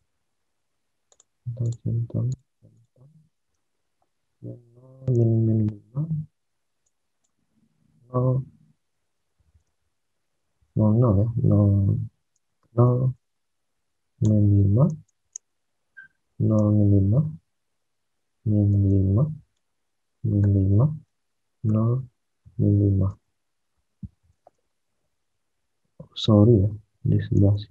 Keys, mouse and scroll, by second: 3.3 alt+Tab, 5.2 alt+Tab, 7.9-9.1 typing, 9.6 alt+Tab, 10.7 alt+Tab, 11.0-15.4 typing, 16.5 Tab, 16.9-26.1 typing, 27.3 Tab.